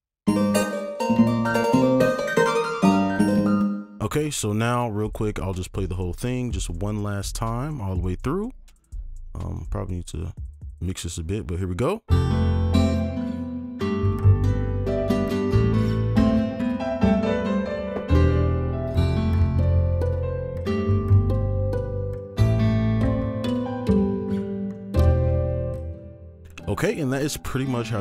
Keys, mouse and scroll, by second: 0.1 right click, 1.4 alt+click, 1.9 alt+2, 2.0 alt+click, 3.6 space, 6.6 double click, 19.8 scroll down 1, 24.1-25.1 scroll down 1.